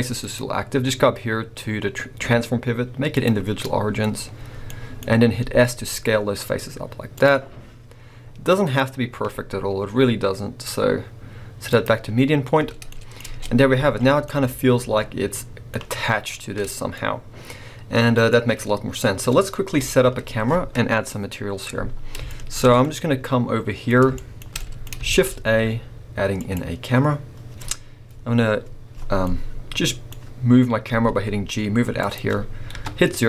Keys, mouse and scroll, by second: 0.1-3.6 drag, 3.6 scroll, 3.9 middle click, 4.2 scroll, 4.7 middle click, 5.0 scroll, 5.4 s, 7.2 click, 12.1 scroll, 12.2 click, 13.3 Tab, 13.3-30.9 middle drag, 13.7 scroll down 2, 13.8 alt+a, 16.7 scroll down 2, 18.3 scroll down 1, 19.7 KP_1, 22.0 scroll down 1, 23.8-24.2 scroll up 1, 25.0 shift+a, 30.9 g, 32.1 click.